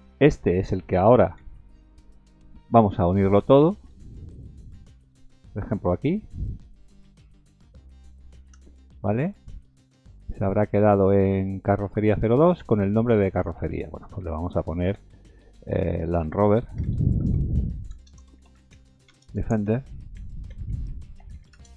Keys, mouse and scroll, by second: 0.7 middle click, 1.4 shift+z, 2.5 b, 3.9 shift+click, 7.8 ctrl+j, 9.5-9.8 scroll down 4, 9.8-11.0 scroll up 7, 12.3 click, 13.0 click, 13.3 click.